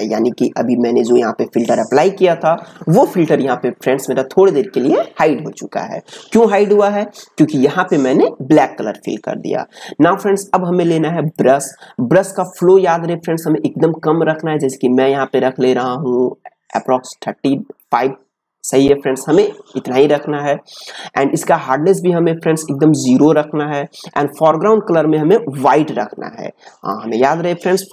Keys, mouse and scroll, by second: 11.2-21.3 drag, 21.3 right click, 22.8-27.9 drag.